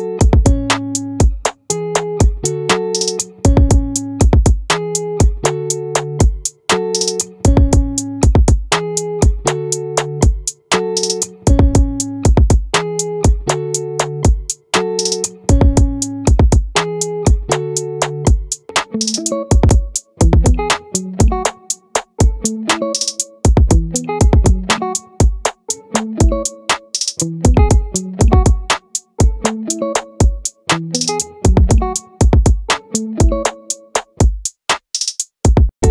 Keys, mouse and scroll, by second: 2.4 middle click, 2.9-5.1 right drag, 5.1 middle click, 5.5-6.9 right drag, 8.9-10.5 right drag, 11.3-13.2 right drag, 15.8 right click, 16.6 middle click, 17.8 middle click, 19.2 middle click, 21.6-27.2 middle drag, 27.4 middle click, 35.8 e.